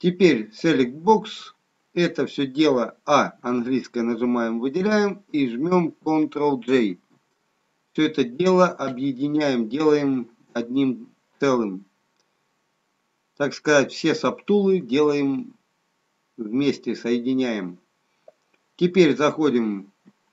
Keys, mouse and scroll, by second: 0.8 click, 3.4 a, 6.8 ctrl+j.